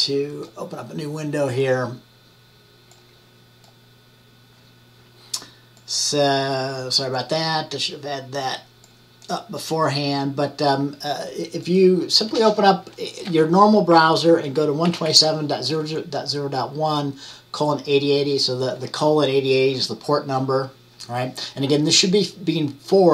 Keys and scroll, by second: 14.1-15.5 typing.